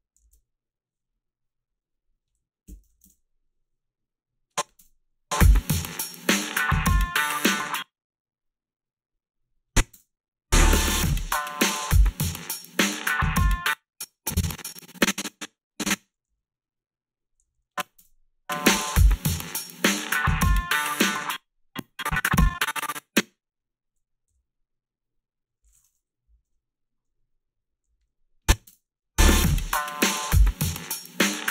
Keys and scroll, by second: 2.4-3.3 typing, 4.8 space, 7.5 space, 9.9 space, 13.5 space, 16.3 s, 17.5 a, 17.9 space, 18.0 a, 21.0 space, 24.3 g, 26.3 Delete, 26.4 Delete, 27.8 a, 28.7 space.